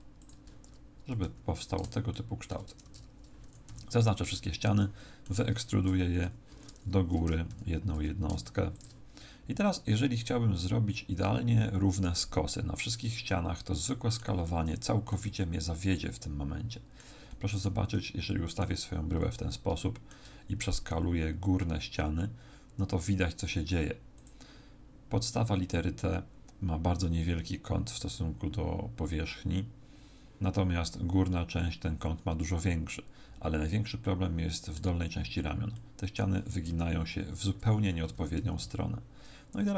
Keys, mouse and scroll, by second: 0.2 ctrl+click, 0.7 Tab, 1.2 z, 2.1 shift+middle click, 2.8 Tab, 3.4 a, 3.7 a, 4.3 middle click, 4.9 middle click, 5.9 w, 7.2 e, 8.8 ctrl+click, 13.3 middle click, 14.4 middle click, 15.3 middle click, 17.3 middle click, 17.9 middle click, 19.0-19.5 scroll up 2, 19.8 shift+middle click, 20.9 s, 24.2 click, 34.0 middle click, 37.0 middle click, 37.0 KP_3, 38.1 a, 38.6 z.